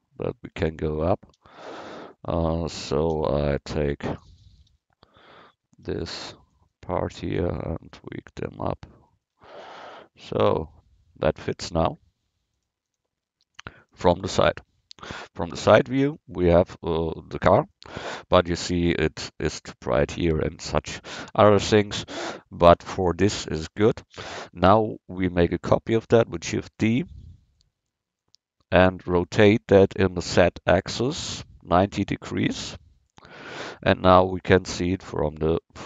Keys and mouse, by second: 1.4 v, 3.2 c, 4.4 a, 4.8 v, 5.9 c, 9.5 Tab, 12.6 click, 22.0 KP_1, 26.5 shift+d, 27.2-30.0 drag, 31.0 r, 34.0-35.8 drag.